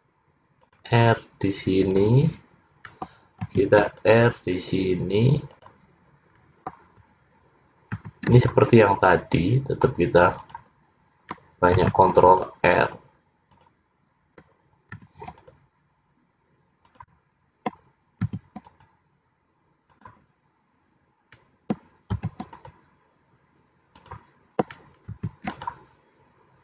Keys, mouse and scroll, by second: 3.6 ctrl+r, 8.1 ctrl+r, 11.9 ctrl+r, 15.4 ctrl+r, 18.3 ctrl+r, 22.2 ctrl+r, 25.2 ctrl+r.